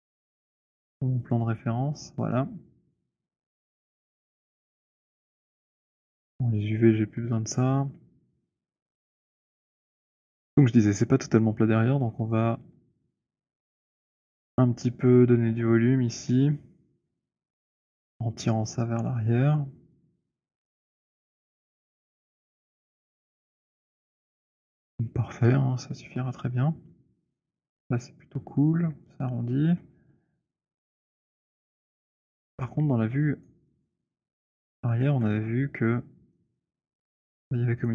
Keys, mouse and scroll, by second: 0.5 click, 1.4 click, 3.6 click, 9.2 click, 12.2 middle click, 12.5 click, 13.4 shift+click, 14.7 shift+click, 15.5 >, 16.4 <, 17.1 <, 21.2 click, 23.0 j, 30.1 alt+click, 30.6-31.9 alt+middle click, 30.6 alt+scroll, 31.3 alt+click, 32.1 alt+click, 32.5 alt+click, 32.8 alt+middle click, 33.5 alt+click, 33.9 alt+click, 34.6 alt+middle click, 35.1 w, 37.8 right click.